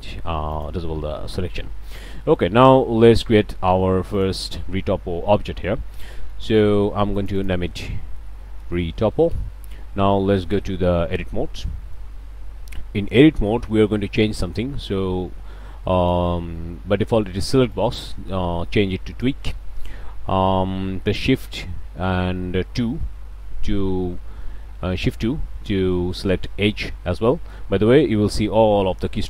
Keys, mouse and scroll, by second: 0.5 drag, 1.3 middle click, 1.4 scroll down 1, 1.6-2.1 shift+middle drag, 2.1 scroll down 1, 2.3 scroll up 1, 2.4-2.8 shift+middle drag, 3.2 shift+a, 4.1 drag, 6.1 click, 7.1 click, 8.2-9.1 typing, 9.3 shift+Return, 10.3 middle click, 10.5 scroll up 2, 11.1 Tab, 11.6-12.1 middle drag, 12.8 a, 13.2 click, 17.7-19.1 drag, 19.1 right drag, 23.1 shift+2.